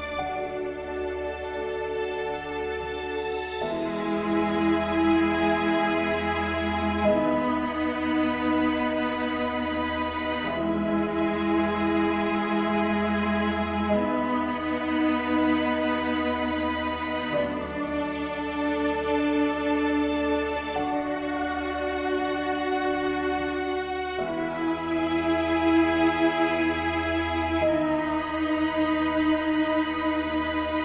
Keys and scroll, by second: 12.4 ctrl+z, 17.5 ctrl+space.